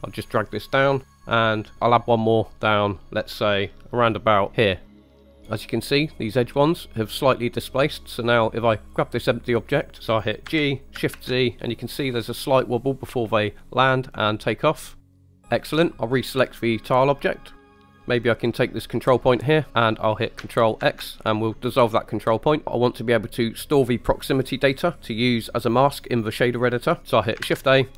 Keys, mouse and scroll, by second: 0.0-1.4 drag, 1.9-4.6 drag, 4.8 click, 5.4 scroll up 3, 8.9 click, 10.0 right click, 10.5 g, 11.2 shift+z, 15.4 right click, 16.9 click, 17.6 scroll down 3, 17.6 middle click, 18.4 click, 20.8 ctrl+x, 27.0 right click, 27.4 shift+a.